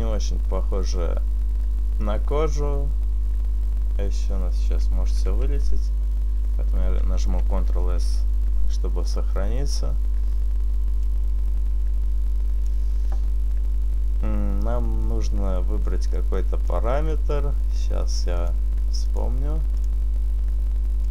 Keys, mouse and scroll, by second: 5.3 ctrl+z, 7.5 ctrl+s, 10.9 click, 16.1 click, 18.4 click, 19.7 click, 21.0 click.